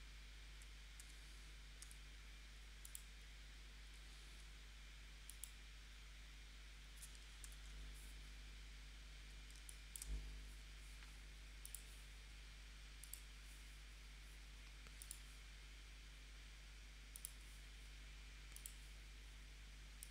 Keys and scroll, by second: 1.0 v, 4.2 a, 4.7 a, 7.5 shift+super+p, 9.6 space.